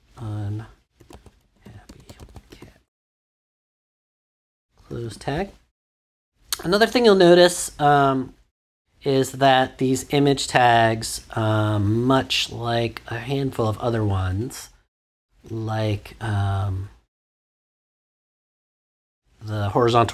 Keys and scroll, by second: 0.0-2.5 typing, 5.0 shift+..